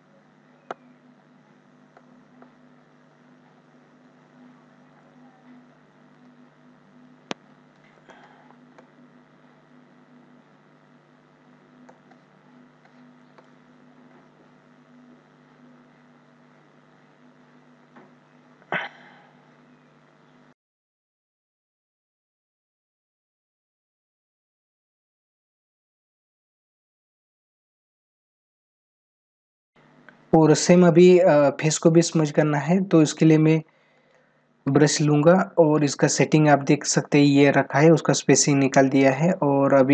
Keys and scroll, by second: 4.5 ctrl+-, 7.8 space, 11.6 space, 28.3 space.